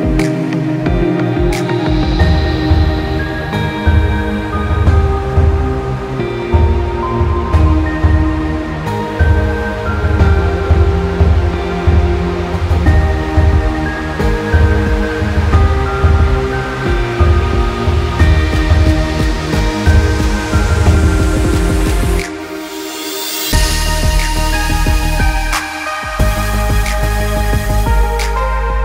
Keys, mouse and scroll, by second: 3.6 alt+scroll up 1, 4.3 click, 4.6 space, 4.7 click, 4.9 space, 5.9 click, 8.1 Down, 10.1 Up, 10.7 Down, 11.1 Up, 11.9 KP_Enter, 13.2 click, 14.7 click, 15.9 KP_1, 16.2 KP_8, 16.3 KP_Enter, 17.6 click, 18.5 shift+click, 26.5 click.